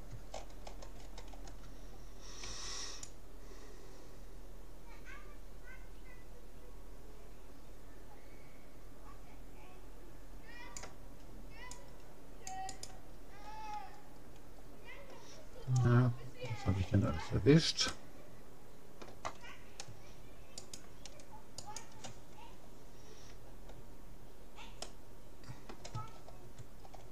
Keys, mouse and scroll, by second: 0.3-3.3 middle drag, 2.5 c, 13.3 middle click, 17.9-20.1 middle drag, 20.7-23.3 right drag, 24.9-26.5 middle drag, 26.7-27.1 middle drag.